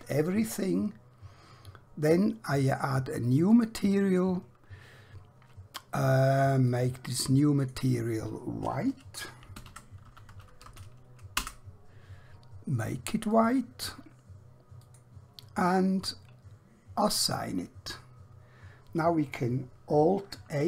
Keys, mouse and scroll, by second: 3.5 click, 6.6 click, 9.6-10.7 typing, 11.5 Return, 13.3 click, 17.5 click, 20.1 alt+Num_Lock.